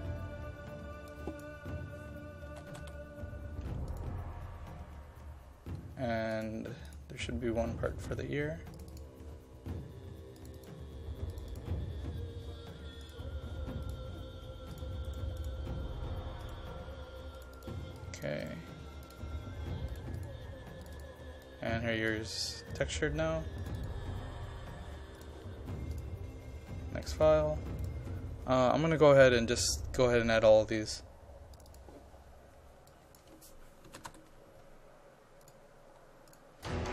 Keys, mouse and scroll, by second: 2.3-3.3 typing, 3.9 click, 7.5-7.9 scroll down 1, 8.8 click, 15.1 right click, 15.4 click, 18.4 right click, 19.0 click, 33.8-34.6 typing, 35.4 click.